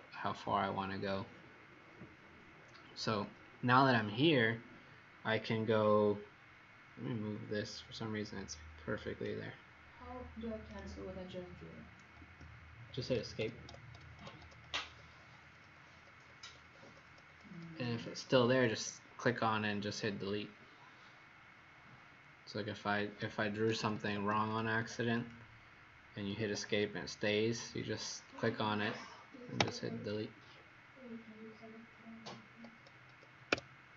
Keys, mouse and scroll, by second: 7.7 click, 10.6 right click, 12.1 Escape, 23.4-24.4 typing, 24.4 click, 25.2 click, 26.3 Escape, 28.2 click, 29.5 Delete, 33.5 Escape.